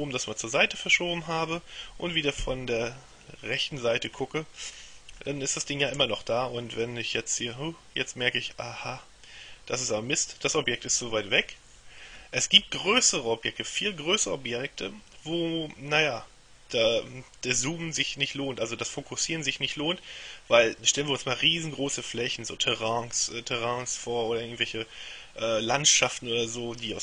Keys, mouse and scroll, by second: 0.1-1.5 shift+middle drag, 1.5-2.2 shift+scroll up 3, 2.5 KP_3, 4.3-4.8 scroll up 2, 4.9-5.4 scroll up 3, 6.9-10.8 middle drag.